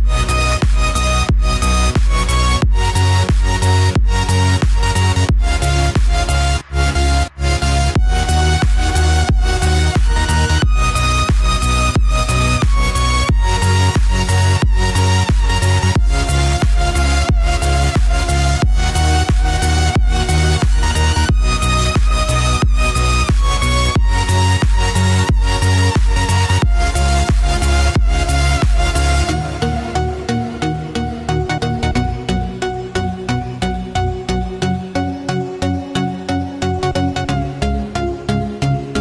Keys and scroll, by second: 1.5-3.5 typing, 7.4 ctrl+s, 9.6-11.7 typing, 17.3 Return, 17.4-20.2 typing, 20.3 Down, 20.6 Return, 21.3 shift+Home, 21.9 F5, 23.7 ctrl+c, 26.1 Return, 26.5-28.5 typing, 29.8 space, 30.2 ctrl+v, 32.0 ctrl+c, 32.6 ctrl+v, 32.9-34.4 typing, 34.3 ctrl+v, 34.8 ctrl+v, 35.5 =, 35.7 ', 36.1 Left, 38.0 ctrl+c, 38.6 ctrl+v.